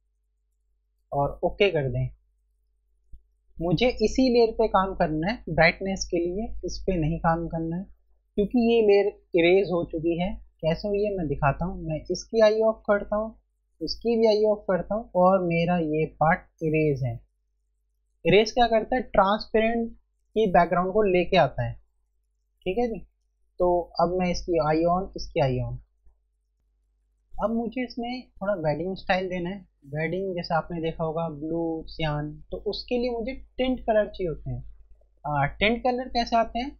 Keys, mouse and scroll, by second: 1.8 click, 12.2 click, 24.1 click.